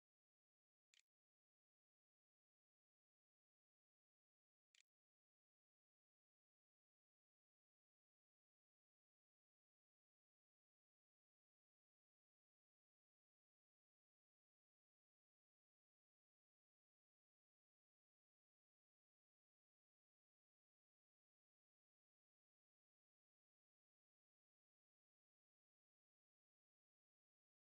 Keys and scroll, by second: 0.0-0.7 typing, 2.3-5.7 typing.